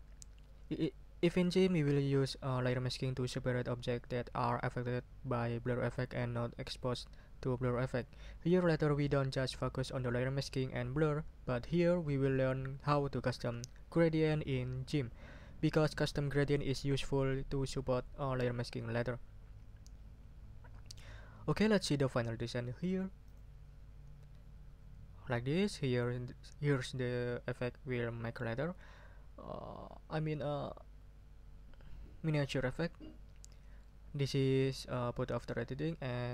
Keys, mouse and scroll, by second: 23.2 click.